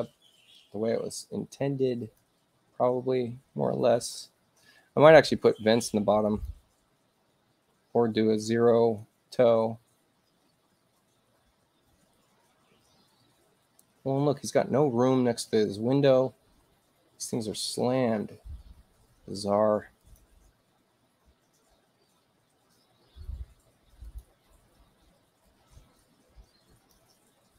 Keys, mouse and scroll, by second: 1.9 click, 6.2 click, 10.4 space, 19.9 click, 23.4 space, 23.9 click, 25.4-26.8 drag.